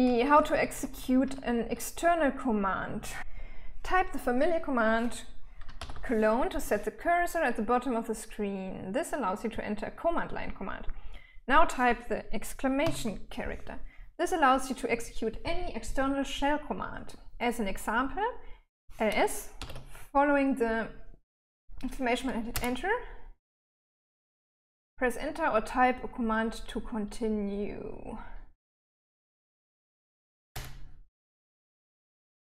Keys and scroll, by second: 0.0-0.9 typing, 6.2 shift+;, 13.2 shift+1, 19.8-20.6 typing, 22.9 Return, 31.0 Return.